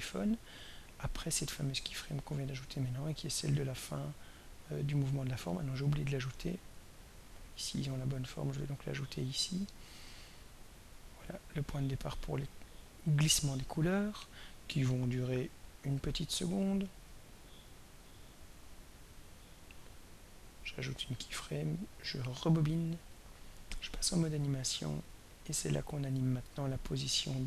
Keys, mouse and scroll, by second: 1.2 click, 2.7 click, 4.4 click, 5.1 click, 7.5 click, 8.6 click, 9.7 click, 11.1 click, 15.1 click, 15.8 click, 16.5 click, 17.1 click, 20.4 click, 21.7 click, 23.1 click, 25.0 click, 26.1 click.